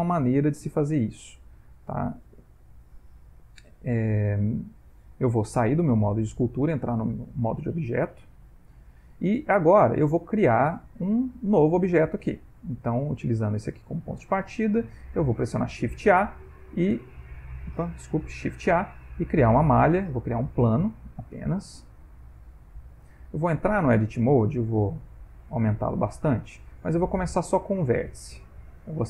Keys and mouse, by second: 0.1 ctrl+middle click, 0.8 middle click, 1.4 middle click, 2.3 ctrl+middle click, 6.2 click, 7.9 right click, 9.5 middle click, 13.0 middle click, 15.6 shift+s, 18.7 shift+a, 21.3 middle click, 22.3 ctrl+middle click, 23.0 middle click, 23.7 Tab, 24.2 s, 25.4 middle click, 28.0 click, 28.7 shift+click.